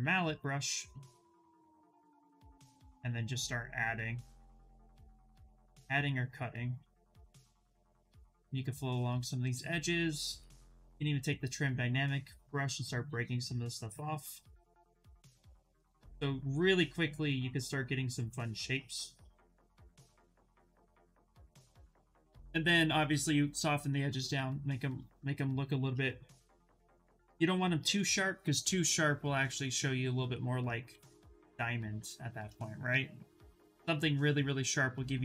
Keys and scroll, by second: 2.8 space, 4.0 space, 10.0-11.2 typing, 31.6 shift+f.